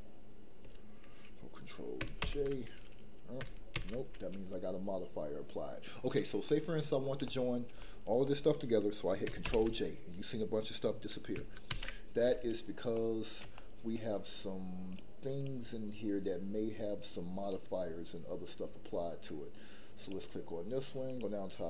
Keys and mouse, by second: 2.2 ctrl+j, 3.7 ctrl+z, 6.4-7.0 middle drag, 7.3 shift+middle click, 7.8-8.2 middle drag, 9.4 ctrl+j, 11.7 ctrl+z, 13.0 middle click, 13.5 shift+middle click, 15.3 click, 17.0 click.